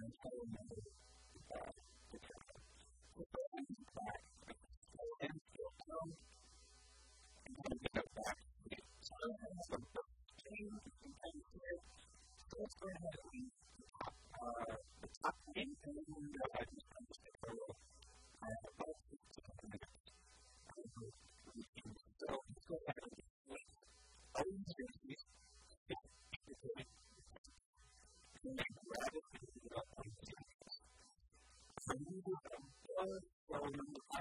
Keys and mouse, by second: 3.2 e, 3.4-5.3 right drag, 3.6 s, 4.7 e, 5.6 click, 5.9 middle click, 6.6 s, 7.7 Tab, 12.2 middle click, 15.4-17.5 middle drag, 16.0 Tab, 17.1 b, 17.8-20.2 middle drag, 19.4-20.6 right drag, 25.8 shift+d, 27.8 KP_1, 28.4 g, 30.6-33.4 drag.